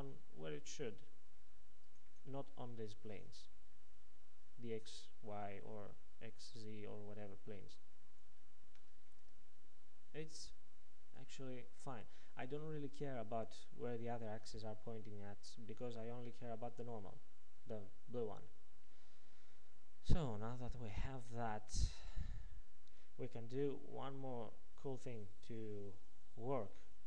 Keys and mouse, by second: 9.1-11.5 middle drag, 16.3-21.3 middle drag.